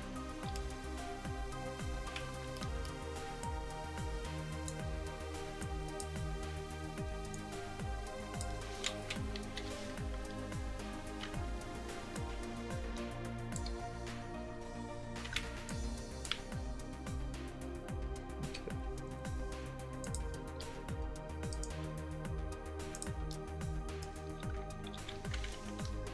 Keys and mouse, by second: 1.0 r, 2.6-5.3 drag, 5.7-9.5 drag, 9.0 KP_1, 9.5 KP_3, 10.3 r, 12.2-14.1 drag, 13.9 r, 15.7-18.2 drag, 16.5 r, 20.4-24.0 middle drag, 21.9 r, 25.0 ctrl+z.